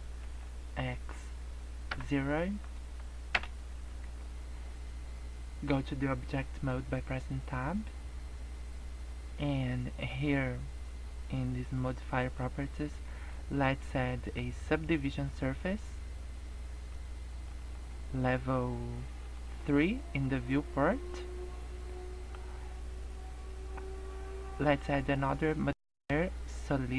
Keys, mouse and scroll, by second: 4.0 Tab, 12.2 click, 15.2 click, 19.2 click, 19.4 click, 22.2 click.